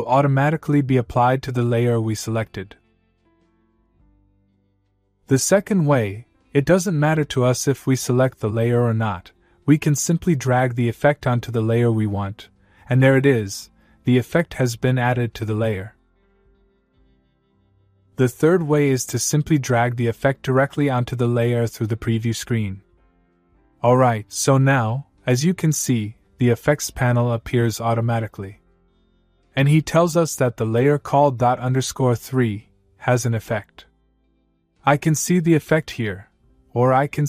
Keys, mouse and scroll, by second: 3.4 ctrl+z, 6.1 click, 9.1-11.5 click, 17.4 ctrl+z, 19.2-21.7 click, 29.7 click, 36.5 click.